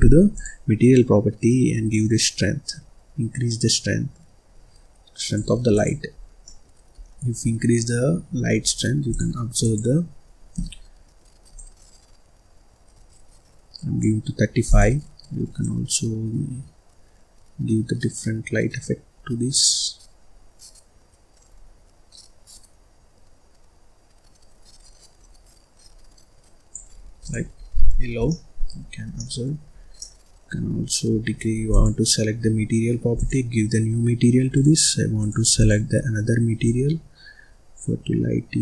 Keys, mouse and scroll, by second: 0.3 click, 1.8-4.9 drag, 5.7 click, 6.1-6.4 scroll down 1, 6.4 middle click, 6.9-7.4 scroll down 3, 7.4 middle click, 8.2-8.7 scroll down 5, 8.7-9.2 scroll up 3, 9.2 click, 9.6 click, 11.5-14.5 drag, 14.6 click, 27.2 click, 27.6-28.2 scroll down 11, 28.2 middle click, 28.8-29.1 scroll down 1, 29.1 middle click, 29.6-29.9 scroll up 2, 29.9-31.6 middle drag, 31.6 click, 33.1 click, 33.8-34.2 scroll down 1, 34.4 click, 35.5 click.